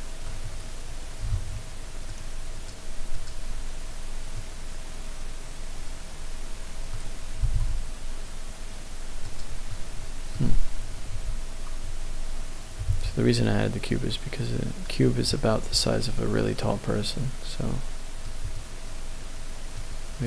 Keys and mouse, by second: 1.2 shift+a, 4.3-6.9 middle drag, 7.4 g, 7.5 z, 9.3 click, 9.6-10.3 middle drag, 12.1 ctrl+z, 13.9 ctrl+z, 16.7-17.3 middle drag, 18.5-19.8 middle drag.